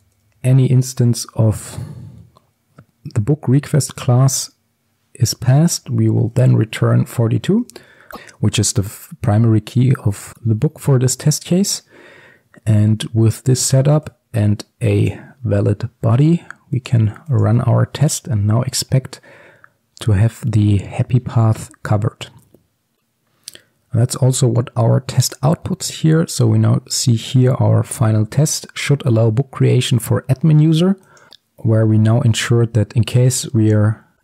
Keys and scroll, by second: 1.8 Return, 6.4 Return.